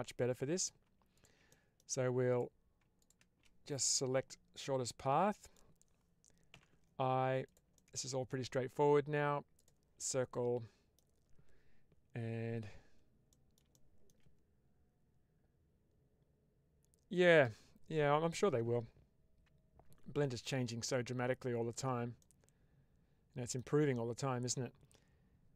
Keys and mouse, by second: 0.1 3, 0.5 click, 1.4 middle click, 2.9 click, 4.4-5.4 middle drag, 7.3 click, 7.7 middle click, 9.5 click, 9.9 middle click, 13.2 middle click, 13.6 shift+middle click, 20.6 middle click, 22.1-23.5 middle drag.